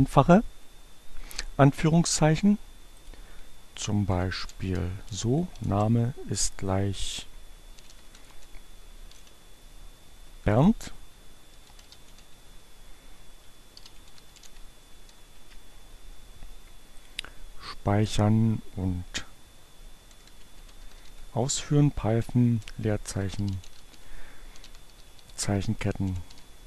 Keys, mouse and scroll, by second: 2.6 click, 3.2-5.6 typing, 7.0-8.1 typing, 9.8 Return, 10.6-14.8 typing, 17.0 click, 17.7 click, 19.6-26.3 typing.